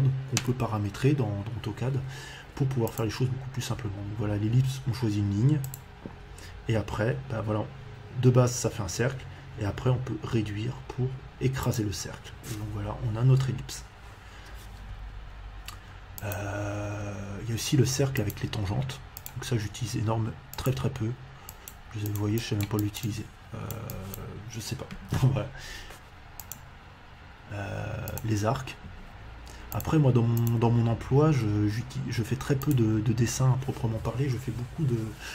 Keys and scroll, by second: 24.9 Escape.